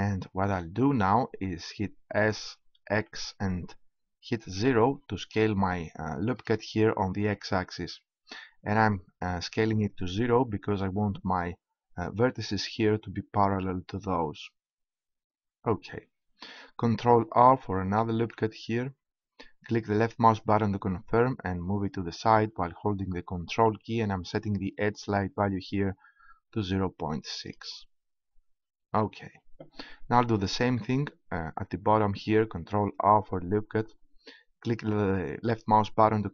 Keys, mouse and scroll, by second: 2.2 s, 17.9 ctrl+r, 27.8-30.5 drag, 32.8 ctrl+r.